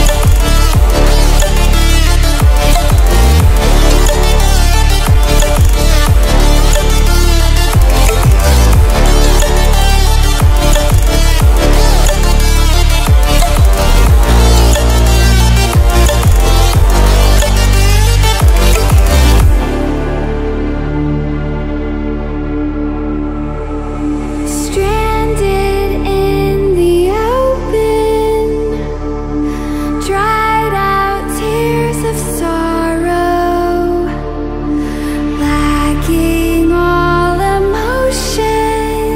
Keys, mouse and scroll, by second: 4.4-13.0 drag, 20.1-21.6 drag, 30.8-36.6 drag.